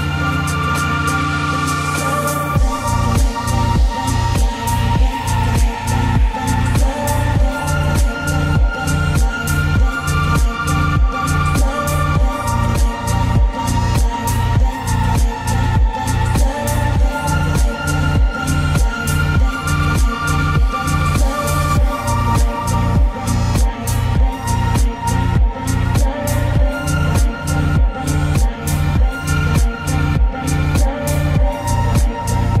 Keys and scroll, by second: 0.3 ctrl+a, 9.6 ctrl+;, 32.2 ctrl+a.